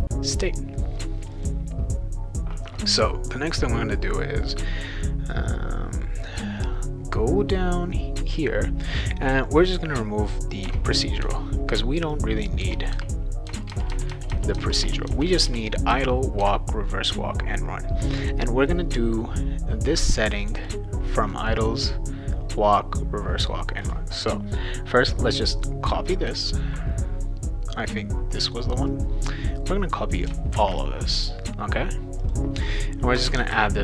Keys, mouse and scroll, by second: 1.3 click, 9.4-10.6 drag, 10.7 BackSpace, 11.2 BackSpace, 12.1 click, 12.6-16.4 typing, 20.2 click, 20.4 click, 20.6 click, 21.2 click, 21.4 click, 25.7-27.9 drag, 28.9-30.2 drag, 30.5 ctrl+c, 32.2 click, 33.2 Return, 33.5 ctrl+v.